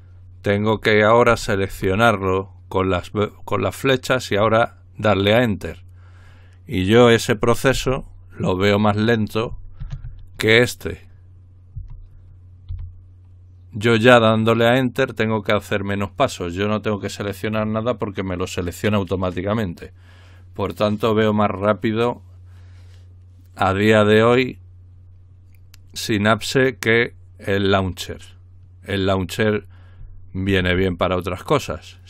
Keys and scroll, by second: 1.3 Down, 1.7 Down, 11.7 ctrl+g, 12.7 typing.